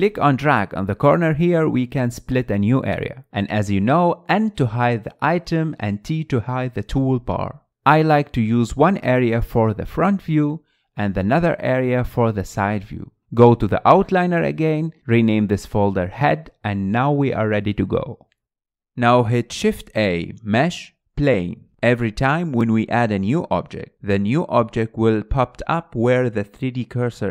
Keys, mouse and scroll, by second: 4.7 click, 4.7 n, 5.8-6.8 drag, 6.8 t, 7.2 t, 7.8 n, 8.5-9.1 scroll up 4, 9.3-12.6 shift+middle drag, 12.6 KP_3, 13.3-13.8 scroll up 2, 13.8 shift+middle click, 14.1-14.7 scroll up 2, 14.7 shift+middle click, 15.2 scroll down 2, 15.3 click, 18.5 click, 19.4 shift+a, 24.5 shift+a, 25.5-26.8 middle drag, 26.8-27.1 scroll up 2, 27.1 shift+middle click.